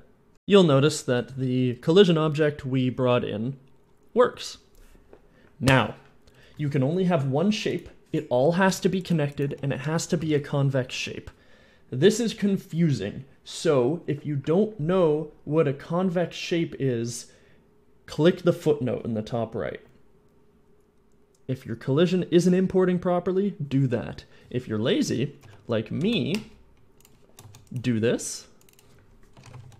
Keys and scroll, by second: 9.3 Tab, 9.7 Tab, 10.2 End, 25.3 Tab, 25.9 x, 27.4 shift+d, 29.3 u, 29.4 c, 29.5 s.